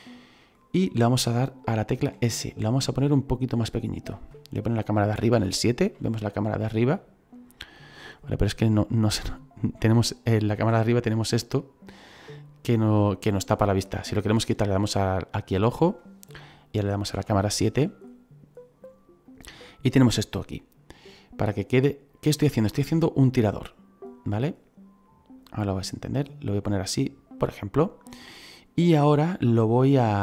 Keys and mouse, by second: 0.3 click, 1.9 s, 3.8 click, 5.3 KP_7, 6.4 shift+middle click, 7.3 click, 8.2 middle click, 11.8 right click, 14.6 click, 17.1 KP_7, 19.2 right click, 25.3 click, 28.2 middle click.